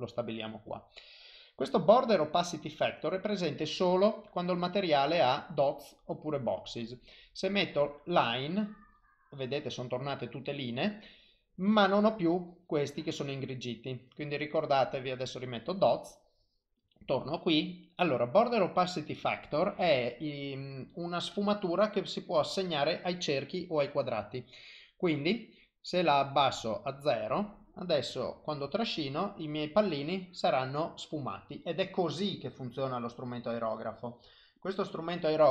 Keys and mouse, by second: 4.3 click, 5.2 click, 10.9 click, 13.8 click, 14.6 click, 16.8 click, 21.9 click, 25.3 click, 27.6 click, 31.0 click, 33.9 click, 34.6 click.